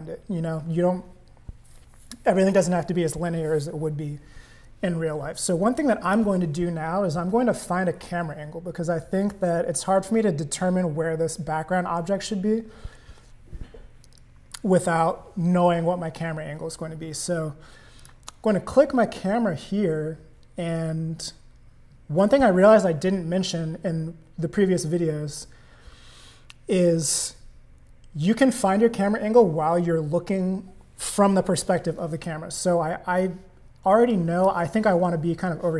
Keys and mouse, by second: 6.0 click, 14.2 click, 18.0 click, 34.1 click.